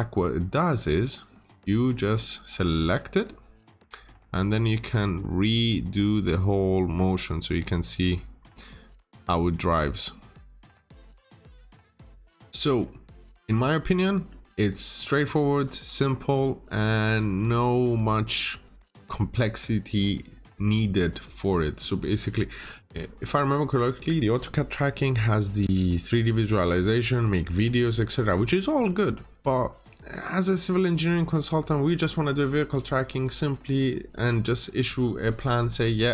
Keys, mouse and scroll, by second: 1.0 click, 1.7 middle click, 2.7 click, 4.8 middle click, 7.4 scroll up 1, 11.1 middle click, 13.1 Escape, 13.7 scroll down 1, 14.0 middle click, 15.6 Escape, 17.3 middle click, 19.4-19.9 scroll up 1, 35.4 scroll down 1, 35.8 middle click.